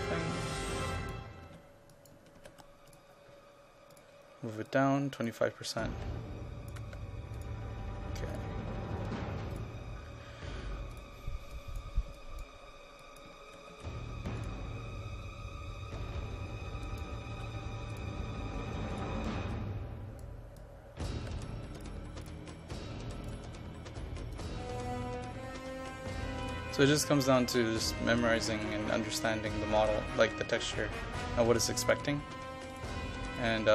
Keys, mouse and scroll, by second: 1.3-2.6 typing, 2.0 click, 3.0-5.9 drag, 6.9 KP_2, 7.0 KP_5, 7.4 click, 13.3 KP_0, 13.6 KP_Decimal, 13.8 KP_5, 14.5 click, 17.1 KP_0, 17.4 KP_Decimal, 17.5 KP_5, 18.0-21.2 drag, 21.2 KP_2, 21.3 KP_5, 21.8 click, 28.6-30.8 typing, 29.7 click, 31.9 click.